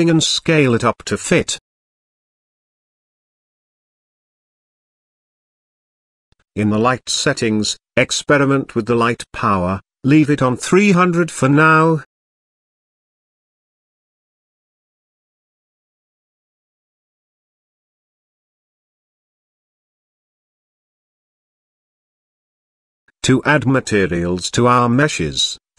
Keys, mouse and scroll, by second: 0.7 click, 1.4 s, 2.4 KP_5, 2.9 click, 3.6 s, 4.7 KP_3, 5.2 click, 6.8 click, 7.6-15.5 drag, 8.4 KP_0, 11.9 KP_0, 17.5 click.